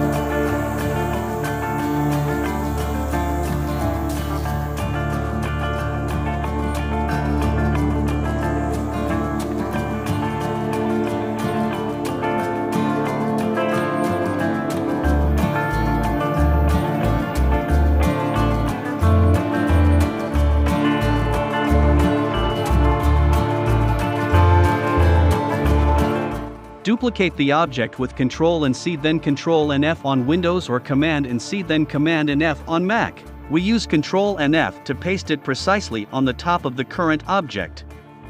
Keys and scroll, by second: 9.2 v, 13.5 a, 17.3 v, 24.7 super+c, 26.0 super+f, 28.0 shift+Left, 29.2 shift+Right, 29.8 shift+Left, 31.6 shift+Left.